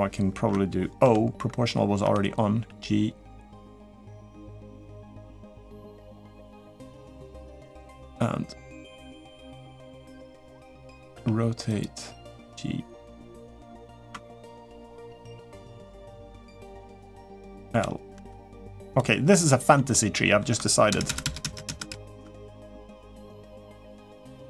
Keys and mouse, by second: 0.8 o, 1.8 o, 2.3 g, 10.9 r, 11.9 g, 14.4 g, 16.7 click, 17.5 l, 19.5 middle click, 20.7 ctrl+KP_Add, 20.8 ctrl+KP_Add, 22.8 g.